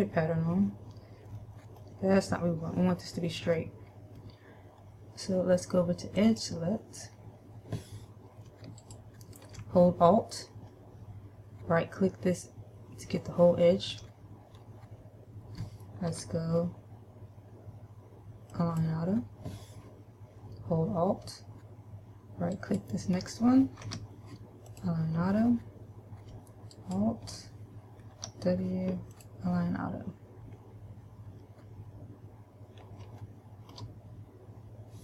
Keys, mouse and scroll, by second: 1.6 middle click, 3.8 middle click, 6.4 click, 9.1 alt+right click, 16.3 w, 22.8 alt+right click, 24.1 w, 27.1 alt+right click, 28.4 w, 33.4 shift+middle click.